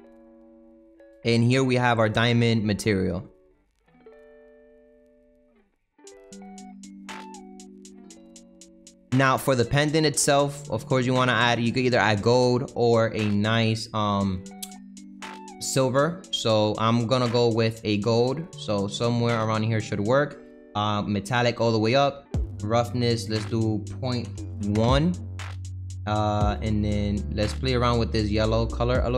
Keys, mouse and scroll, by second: 0.0 click, 1.0 click, 1.5 middle click, 2.0-2.4 scroll up 3, 2.4-4.5 middle drag, 4.5-5.4 scroll up 3, 5.4-8.0 middle drag, 8.0-8.9 scroll down 8, 8.3 middle click, 8.9-10.5 middle drag, 10.5 click, 11.1-13.7 middle drag, 13.7-16.2 drag, 21.3-26.7 drag, 28.6 click.